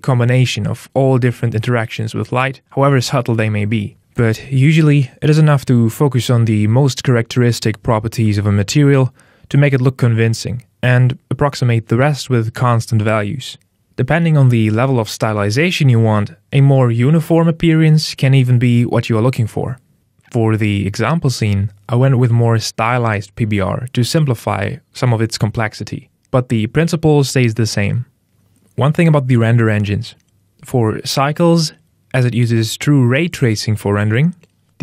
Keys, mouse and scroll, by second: 4.1 click, 5.0 click, 6.1 middle click, 7.1 click, 7.8 middle click, 8.5 scroll down 1, 8.8 middle click.